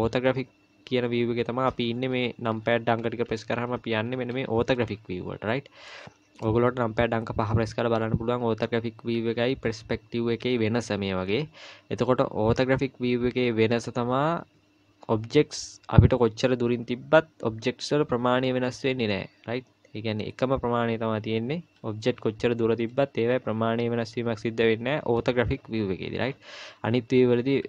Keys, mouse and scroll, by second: 0.1 KP_1, 1.9 KP_3, 3.0 KP_7, 3.7 KP_1, 4.2 KP_3, 4.7 KP_7, 5.9 middle click, 6.6 KP_5, 7.0 KP_5, 8.3 KP_5, 10.4 KP_5, 12.5 KP_5, 13.1 KP_1, 20.5-21.1 scroll up 2, 21.1-22.2 scroll up 2, 22.2 KP_3, 23.4-24.1 scroll down 3, 26.5 KP_5, 27.5 KP_3.